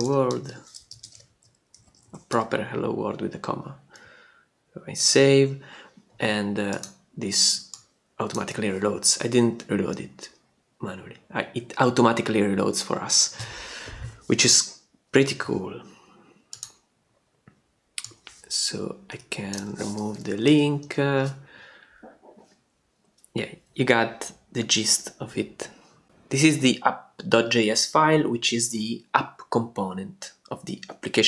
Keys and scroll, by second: 0.0-0.8 typing, 0.9 alt+shift+d, 1.0 alt+shift+i, 1.2 alt+shift+Left, 2.3 ,, 5.0 super+s, 19.6 BackSpace, 20.4 super+BackSpace, 20.5 super+s.